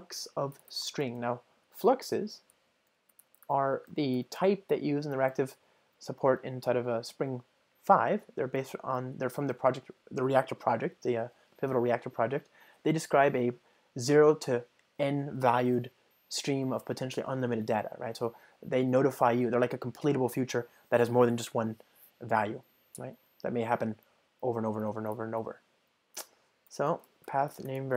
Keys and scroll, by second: 5.4 alt+Return, 13.4 ctrl+alt+shift+Right, 26.8 Return.